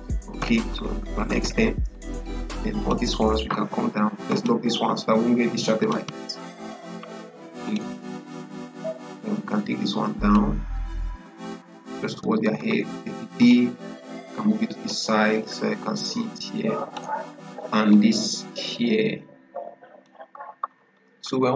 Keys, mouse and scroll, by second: 0.3 Left, 1.8 click, 4.2 click, 7.5-11.0 drag, 11.6 Down, 12.0 Up, 13.3-20.4 drag, 20.4 Down.